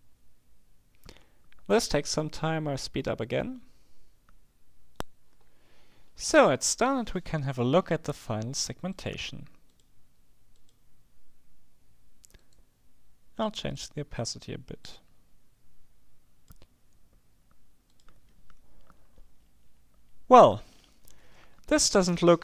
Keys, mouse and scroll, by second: 9.0 click, 9.8 click, 10.7 click, 12.5 right click, 13.8 click, 14.9-17.1 drag, 18.0 click, 19.1-19.7 scroll up 1, 20.3-20.9 scroll up 1, 21.3-21.9 scroll up 1.